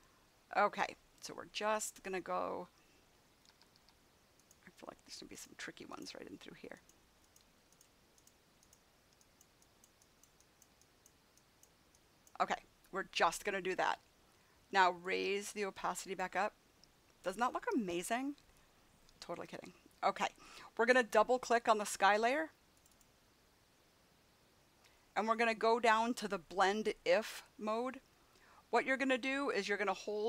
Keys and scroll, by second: 3.3 [.